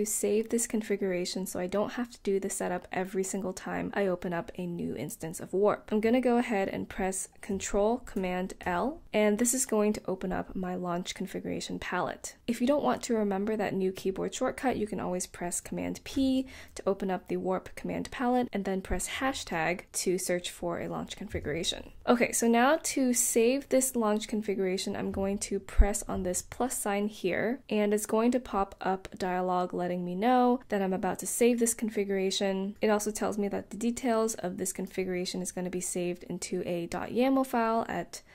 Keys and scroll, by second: 1.0 typing, 2.6 typing, 8.2 ctrl+super+l, 12.4 ⟲, 15.9 super+p, 18.9 shift+3.